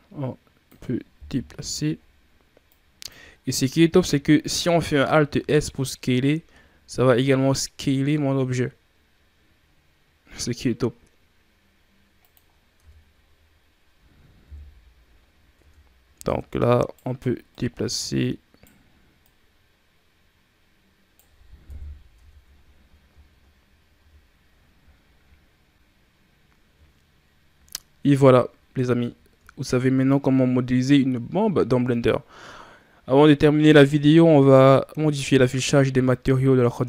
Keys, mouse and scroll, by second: 1.0 KP_1, 2.5 click, 3.1 ctrl+scroll up 1, 3.1 ctrl+scroll down 5, 3.6 scroll up 4, 4.3-4.7 shift+scroll up 4, 5.3 alt+s, 12.3-13.5 scroll down 5, 12.6 Tab, 14.3 KP_3, 15.1 scroll up 1, 15.4 Tab, 16.1 right click, 17.3 right click, 19.0 right click, 21.5 KP_1, 22.0 Tab, 22.5-23.2 scroll down 8, 23.4 scroll up 3, 23.8 a, 24.8-25.3 ctrl+scroll up 3, 26.1 scroll down 1, 26.9 shift+scroll down 1, 28.4 scroll down 2.